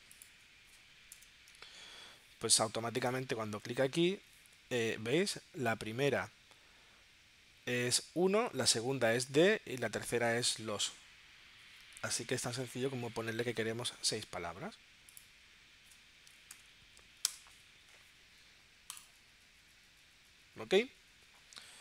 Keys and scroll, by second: 1.1 BackSpace, 16.5 6, 17.3 Tab.